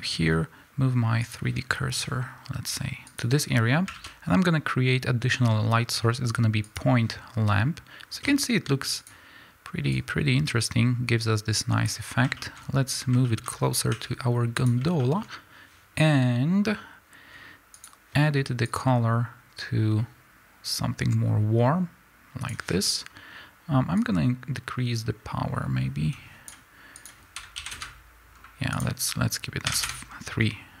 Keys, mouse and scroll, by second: 1.2 click, 3.0 click, 6.7 shift+a, 9.0 click, 9.9-13.9 drag, 13.9 g, 14.5 click, 24.0-30.8 drag, 27.7 KP_Enter, 29.8 KP_Enter.